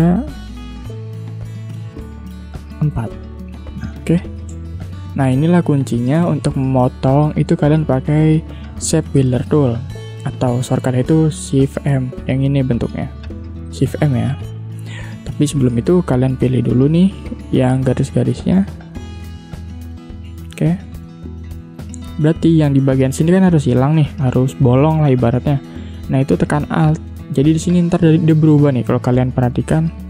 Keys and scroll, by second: 4.4 space, 6.0 v, 11.1 shift+m, 14.4 v, 21.1 shift+m.